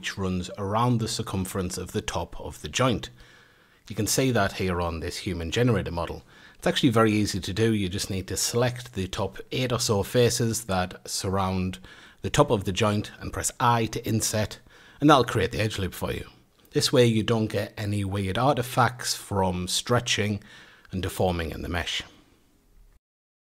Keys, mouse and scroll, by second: 0.6 alt+shift+click, 1.7 click, 2.1 click, 2.7 middle click, 3.3 Tab, 3.6-4.9 middle drag, 4.9 Tab, 5.4-6.4 scroll up 1, 6.4-7.6 middle drag, 7.6 click, 8.4 shift+click, 8.8 shift+click, 9.2 shift+click, 9.7 shift+click, 10.1 shift+click, 10.6 shift+click, 10.9 shift+click, 11.4-12.8 middle drag, 12.8 i, 14.7 a, 15.3 alt+shift+click, 16.4 click, 16.8 click, 17.4-18.6 middle drag, 18.6 Tab, 18.9-19.7 scroll down 1, 19.7-22.8 middle drag.